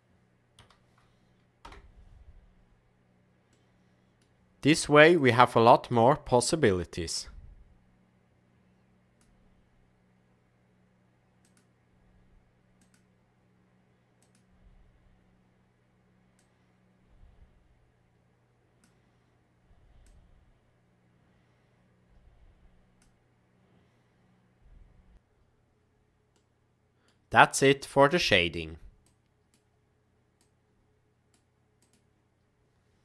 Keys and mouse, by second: 3.4 middle click, 5.6 click, 11.4 click, 16.3-18.8 drag, 20.0-23.3 drag, 26.3 middle click, 27.7-28.7 drag, 29.0-29.6 drag, 30.4 click, 31.8 click.